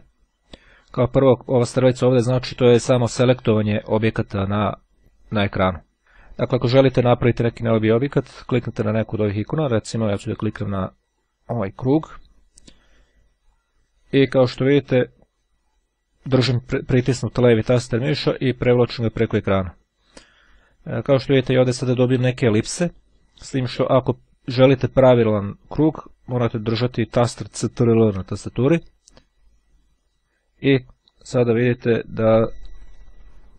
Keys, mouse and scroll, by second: 1.3-2.4 drag, 11.4-12.5 drag, 13.5-33.5 drag.